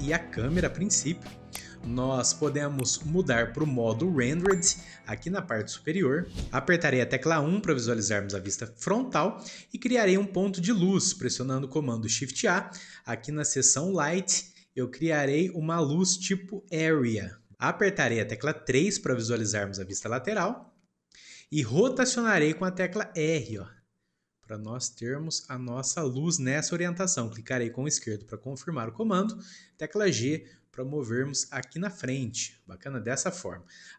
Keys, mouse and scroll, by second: 0.8 Delete, 1.7-5.5 shift+middle drag, 6.2-8.2 shift+middle drag, 8.2 KP_1, 19.8 KP_3, 32.5-33.9 middle drag.